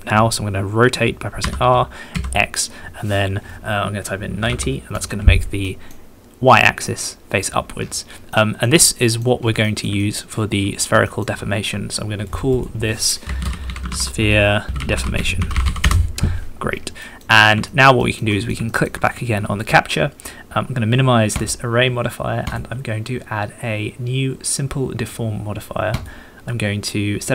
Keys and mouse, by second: 1.4 r, 2.1 x, 4.3 KP_9, 4.4 KP_0, 5.6 middle click, 6.8-7.4 middle drag, 8.3 middle click, 9.0 middle click, 9.6 middle click, 10.0 shift+click, 11.1 shift+click, 12.2 middle click, 12.5-15.9 middle drag, 17.0 middle click, 17.6 shift+middle click, 18.0 shift+middle click, 18.3 middle click, 18.6 shift+middle click, 19.0 middle click, 22.4-26.7 middle drag.